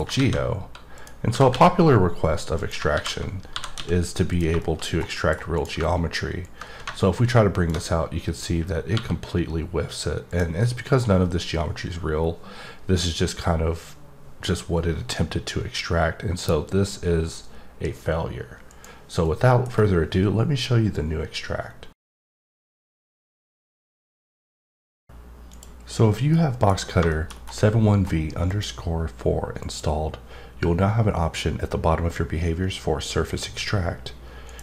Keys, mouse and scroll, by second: 0.9 click, 2.6 click, 4.3 click, 4.6 middle click, 4.9 scroll up 2, 5.1 middle click, 5.6 click, 6.4 click, 10.3 click, 10.6 middle click, 18.7 click, 19.2 middle click, 26.3 middle click, 27.1 middle click, 27.3 scroll up 1, 28.0-28.5 scroll up 1, 28.5 click, 29.6 click.